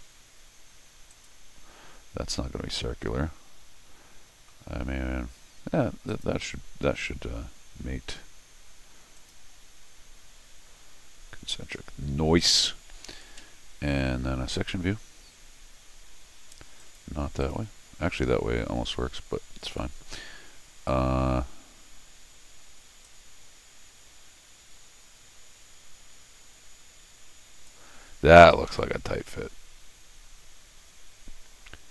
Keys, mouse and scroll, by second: 1.1 click, 4.6-5.2 scroll up 3, 6.1 click, 6.6 scroll down 2, 7.1 scroll up 2, 9.2 click, 14.5 click, 16.8 click, 17.4 click, 19.8-21.3 middle drag, 23.0-27.7 drag, 28.4 click, 29.5 scroll up 2.